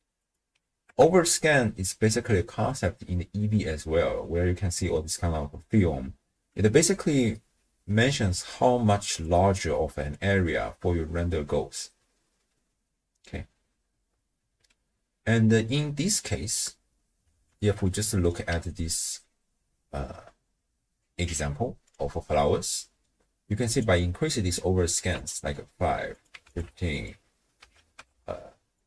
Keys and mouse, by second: 0.2 click, 0.8 KP_0, 2.7 click, 3.7 click, 7.1-10.1 d, 8.9 click, 10.1-13.3 drag, 13.2-14.5 d, 16.2 click, 17.5 alt+shift+click, 17.9 click, 18.0 middle click, 18.2 click, 18.5 d, 18.7-21.3 drag, 21.3 d, 21.3 d, 21.9 click, 22.5 click, 22.6 middle click, 22.7 click, 23.7-25.3 drag, 26.1 click, 26.9-28.8 drag, 28.1 5.